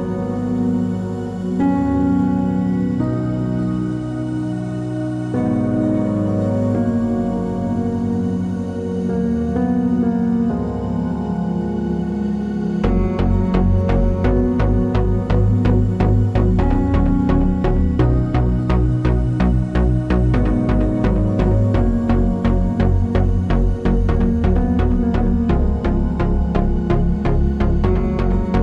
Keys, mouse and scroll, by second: 1.6 scroll up 1, 2.1 middle click, 2.5-3.1 scroll up 4, 3.1 middle click, 3.7-6.1 scroll up 1, 6.1-8.7 drag, 15.0-17.5 drag, 22.4-25.0 drag.